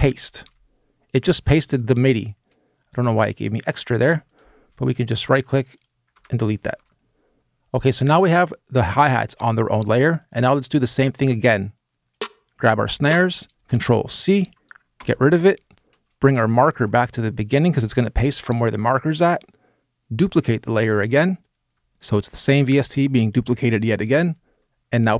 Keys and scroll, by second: 5.9 BackSpace, 13.9 super+c, 14.7 BackSpace, 23.8 super+v.